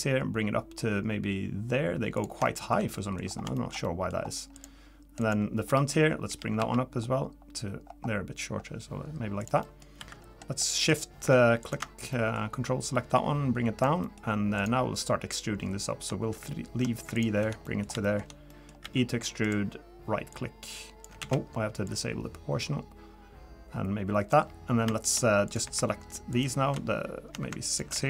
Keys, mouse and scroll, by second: 2.4 shift+middle click, 3.2 scroll up 4, 3.5 shift+middle click, 3.8 middle click, 4.2-4.5 scroll up 1, 4.5 click, 5.2 click, 5.7 scroll down 1, 6.3 g, 9.6 middle click, 9.8 scroll down 1, 10.0 3, 10.9 click, 11.6 ctrl+shift+click, 12.1 middle click, 12.9 click, 14.0 middle click, 14.6 click, 17.1 ctrl+shift+click, 17.6 middle click, 18.0 shift+middle click, 18.5 middle click, 18.8 e, 20.3 click, 21.2 ctrl+z, 21.8 click, 22.6 click, 25.5 click, 26.3 ctrl+shift+click, 26.7 ctrl+shift+click.